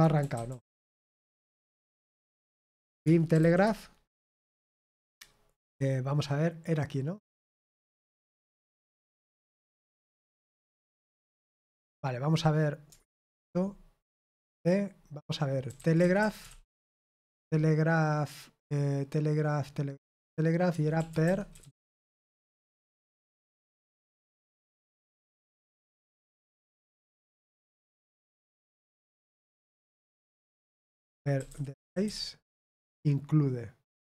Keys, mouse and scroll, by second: 3.6-4.2 typing, 16.7-17.1 typing, 27.5 click, 30.8-32.6 typing.